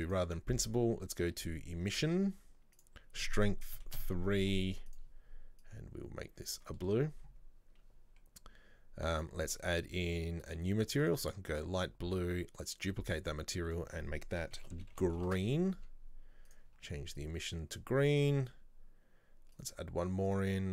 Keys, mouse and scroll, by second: 0.2-5.1 drag, 9.3 click, 10.5-12.9 drag, 13.2-15.2 drag, 15.2 e, 16.6 click, 19.7 click, 20.4-20.7 drag.